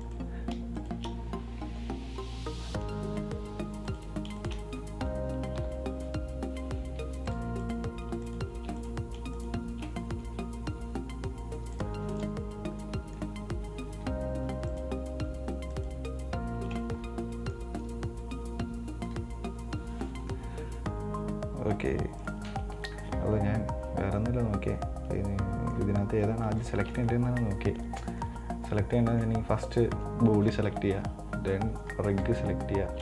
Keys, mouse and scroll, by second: 0.3 right click, 1.0 shift+right click, 2.5 ctrl+p, 4.2 right click, 4.6 shift+right click, 5.8 ctrl+p, 7.6 click, 7.9 right click, 8.5 shift+right click, 9.6 shift+right click, 11.1 ctrl+p, 12.0 click, 12.3 right click, 13.0 scroll down 1, 13.1-14.5 middle drag, 14.5-15.0 scroll up 1, 15.0 right click, 16.0 shift+right click, 19.2 ctrl+p, 22.5 right click, 23.3 scroll down 1, 23.3-26.3 middle drag, 26.5-27.0 scroll up 3, 27.0-29.9 shift+middle drag, 29.9 right click, 32.5 shift+right click.